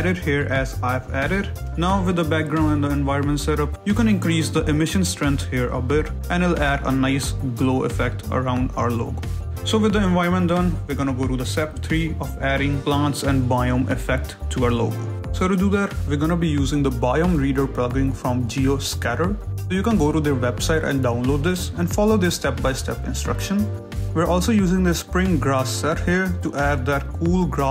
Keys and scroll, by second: 0.5 Escape, 3.7 a, 8.5 ctrl+z, 14.2 shift+z.